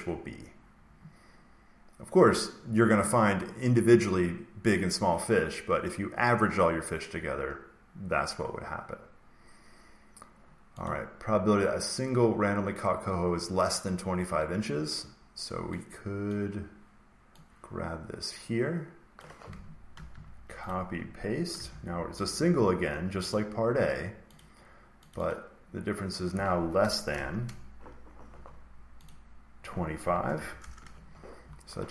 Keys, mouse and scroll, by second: 10.8 click, 16.2 click, 19.0 click, 19.8 ctrl+c, 20.6 click, 21.6 ctrl+v, 22.2 click, 23.2 click, 25.0 click, 25.2 click, 26.7 BackSpace, 27.2 shift+,, 29.0 click, 29.9 typing, 30.5 Return.